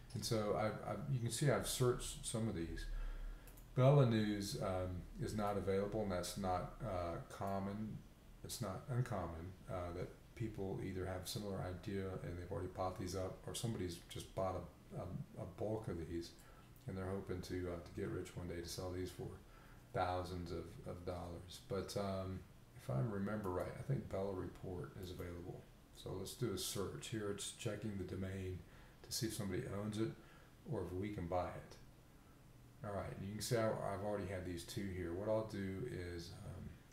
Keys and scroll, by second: 20.9 b.